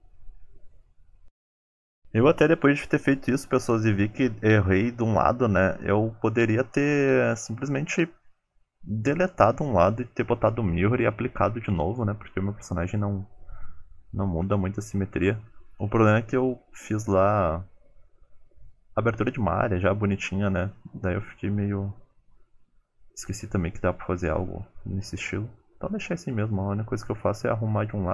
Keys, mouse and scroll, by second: 0.0-2.3 typing, 1.0 click, 1.2 shift+middle click, 1.4 click, 1.8 shift+middle click, 2.2 click, 2.8 shift+middle click, 3.3 click, 3.4 g, 4.0 click, 4.1 g, 6.2 middle click, 6.8 click, 7.1 shift+click, 7.2 middle click, 7.5 g, 8.2 middle click, 8.6 alt+z, 8.9 click, 9.1 g, 9.6 alt+z, 10.0 alt+z, 10.2 click, 10.4 shift+click, 10.6 middle click, 10.9 alt+z, 11.0 g, 11.8 alt+z, 12.0 click, 12.3 alt+z, 12.4 middle click, 12.6 g, 13.3 middle click, 13.7 shift+middle click, 14.1 alt+z, 14.4 click, 14.6 alt+z, 14.7 middle click, 14.9 g, 15.5 middle click, 15.8 middle click, 16.3 click, 16.5 g, 17.1 click, 17.4 g, 17.9 click, 18.3 shift+click, 18.5 g, 19.2 shift+middle click, 19.7 click, 19.9 g, 20.5 middle click, 20.8 middle click, 21.0 click, 21.4 g, 22.1 middle click, 22.5 g, 23.0 click, 23.1 g, 23.6 middle click, 24.6 shift+click, 24.8 alt+z, 25.0 shift+click, 25.3 alt+z, 25.4 g, 25.9 alt+z, 26.1 click, 26.4 g, 26.9 alt+z, 27.1 middle click, 27.5 g, 28.0 alt+z.